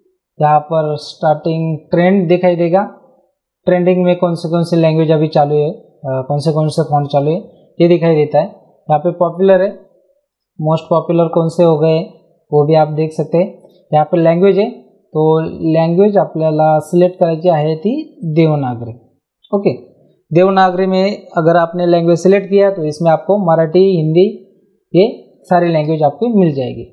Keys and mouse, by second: 1.6 click, 10.3 click, 13.6 click, 15.8 click, 18.2 click.